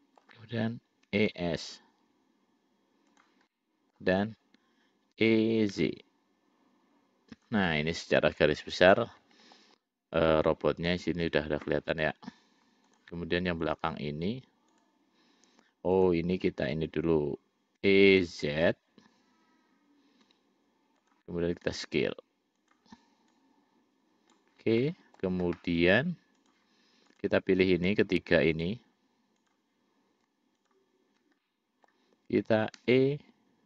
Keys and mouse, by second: 1.4 e, 3.8 middle click, 5.4 e, 7.9-9.9 middle drag, 10.6 middle click, 13.2 click, 14.9 click, 16.2 shift+click, 18.1 e, 22.0 s, 23.6-24.7 drag, 25.1 middle click, 26.7 click, 27.3 click, 28.8 click, 29.7 click, 31.7 middle click, 33.1 e.